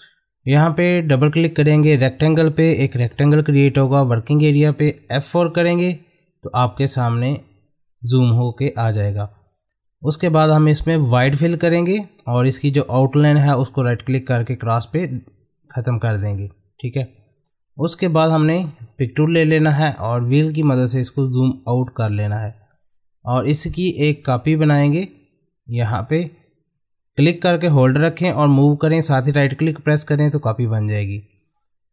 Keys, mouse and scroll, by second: 5.4 F4, 11.5 click, 11.5 click, 15.0 right click, 17.8 click, 21.1-21.8 scroll down 1, 22.4 middle click, 23.4-24.7 drag, 24.7 ctrl+right click, 30.9-31.9 middle drag.